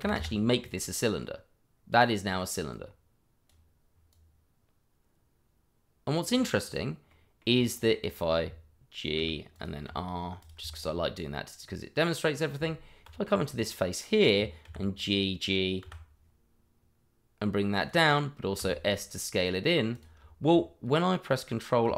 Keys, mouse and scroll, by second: 0.0 1, 0.1 Return, 1.7 scroll down 1, 2.7 click, 7.1 middle click, 7.5 click, 7.8 middle click, 9.5 click, 10.8 middle click, 12.5 middle click, 12.5 Tab, 13.5 click, 14.6 g, 17.8 click, 18.5 s, 19.9 click, 20.2 Tab.